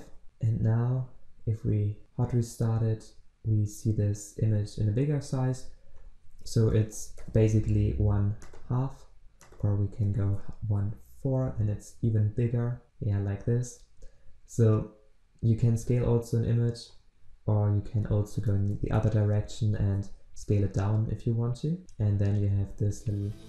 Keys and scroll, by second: 0.2 ctrl+s, 11.5 ctrl+s, 20.3 ctrl+s.